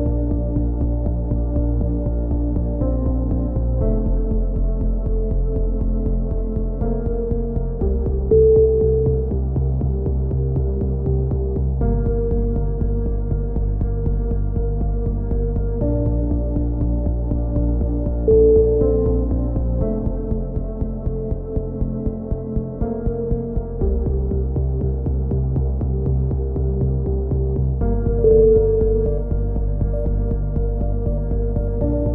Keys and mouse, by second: 0.2-1.6 drag, 1.8 a, 2.1 z, 2.6 Tab, 3.5 z, 3.8 Tab, 4.5 click, 4.9 z, 5.3 z, 5.5 middle click, 7.6 b, 9.7-11.0 middle drag, 10.2 c, 11.0 right click, 13.4 middle click, 14.1-15.3 typing, 15.6 right click, 16.0 right click, 16.4 middle click, 17.8-19.5 drag, 19.3 a, 19.5 middle click, 19.6 z, 20.4 z, 22.0 z, 22.7 click, 23.9 KP_3, 24.5 z, 25.0 c, 26.8 ctrl+z, 28.6 a, 28.6 z, 29.8 click, 30.6 click, 30.8-32.1 middle drag.